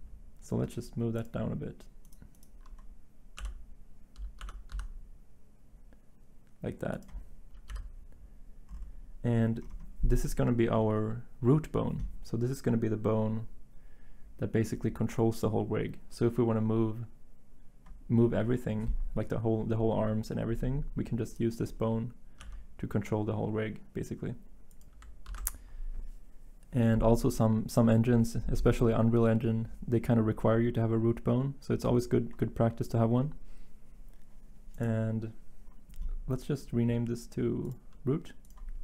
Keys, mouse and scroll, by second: 3.4 g, 4.4 y, 4.7 z, 7.7-14.1 drag, 22.4 g, 25.3 ctrl+z.